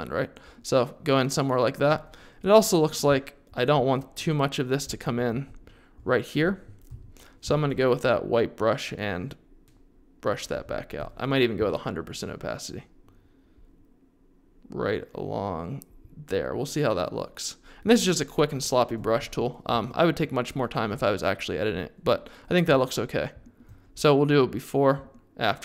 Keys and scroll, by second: 5.3 x, 6.9 x, 7.4 4, 11.5 0.